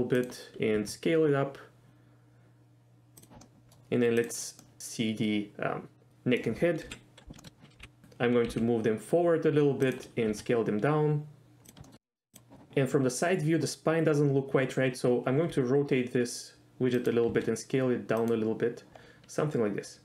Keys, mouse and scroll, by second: 0.2 click, 0.8 s, 3.2 click, 3.4-3.7 middle drag, 4.2 click, 4.6-6.4 middle drag, 6.9 KP_3, 7.4 shift+middle click, 7.8 g, 8.5 g, 9.9 click, 10.3 s, 11.6 click, 11.8 shift+middle click, 12.0 shift+middle click, 15.4 r, 17.0 click, 17.3 s, 18.2 click.